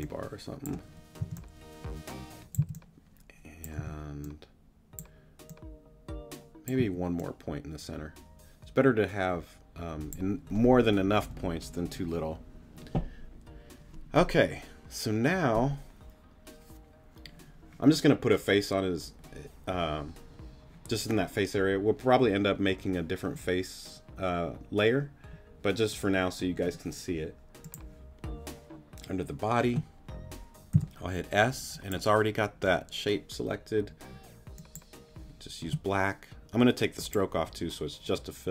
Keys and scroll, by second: 0.1 shift+t, 1.2 shift+t, 1.8 t, 2.5 c, 3.8 t, 6.8 a, 30.7 s.